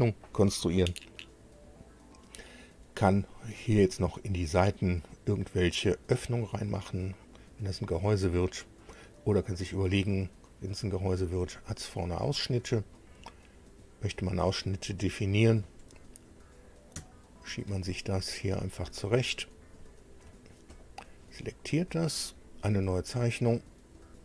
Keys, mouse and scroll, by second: 8.4-11.3 drag, 11.3 middle click, 11.4-12.7 drag, 12.7 middle click, 12.9-14.6 drag, 14.8 click, 17.0 shift+click, 18.1 click, 18.5 click, 18.8 scroll down 2, 19.7 shift+click, 20.7 click, 24.0 click.